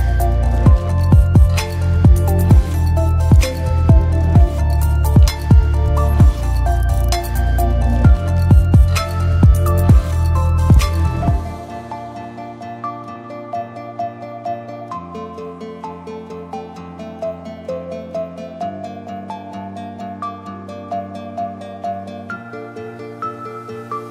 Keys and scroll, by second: 16.7 d.